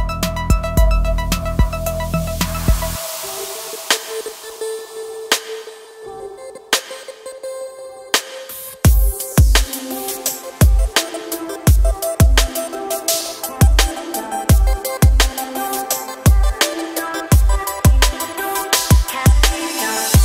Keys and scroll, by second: 7.5 shift+e, 10.7 Escape, 12.3 a, 15.7 shift+e, 19.4 Tab.